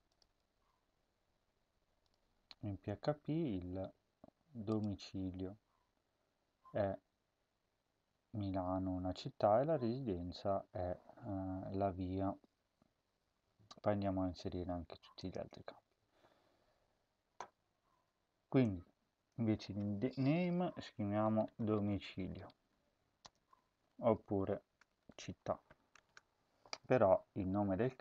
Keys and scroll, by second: 20.7-26.5 typing.